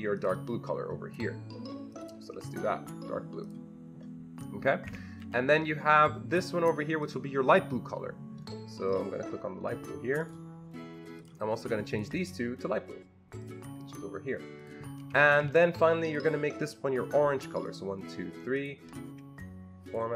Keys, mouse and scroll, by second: 0.2 click, 1.9 click, 3.4 click, 4.9 Escape, 7.1 click, 8.9 click, 10.2 click, 11.2 click, 11.9 ctrl+click, 11.9 ctrl+click, 13.4 ctrl+click, 14.6 ctrl+click, 15.1 Escape, 15.3 Escape, 16.1 click, 16.1 Escape, 16.1 click, 17.7 ctrl+click, 18.6 ctrl+double click, 19.8 ctrl+double click.